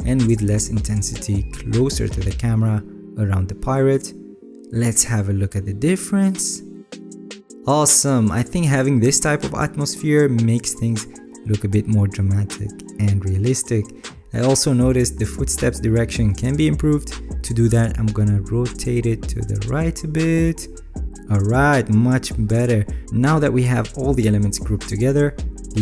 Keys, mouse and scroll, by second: 0.3 alt+right click, 4.4 alt+right click.